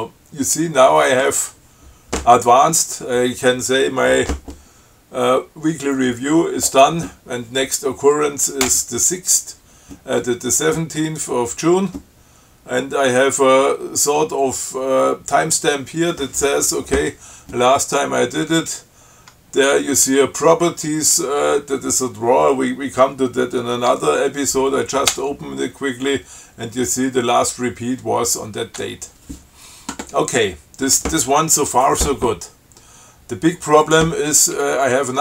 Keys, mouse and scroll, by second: 18.8 click, 25.4 Tab, 29.0 Tab, 34.1 click, 34.8 q.